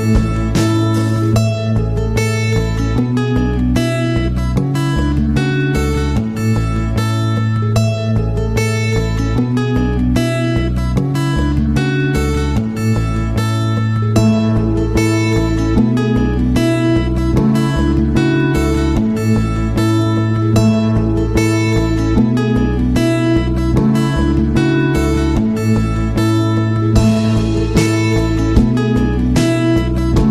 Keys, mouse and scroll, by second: 21.6 click, 29.5-30.3 drag.